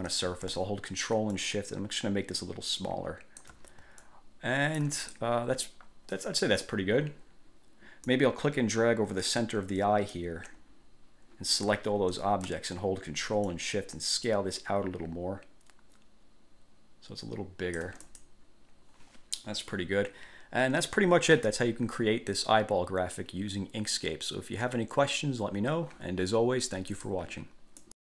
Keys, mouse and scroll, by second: 1.5-3.7 ctrl+shift+drag, 4.1-5.5 ctrl+shift+drag, 6.0-6.4 scroll down 2, 6.7 scroll up 2, 8.2-10.5 drag, 13.7-18.6 ctrl+shift+drag, 27.1 click, 28.0 click.